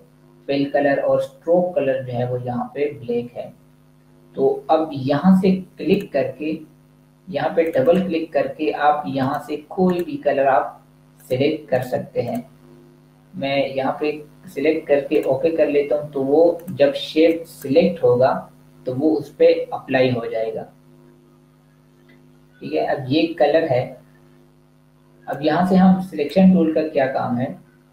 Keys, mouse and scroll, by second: 5.8 click, 15.1 click, 25.1 click.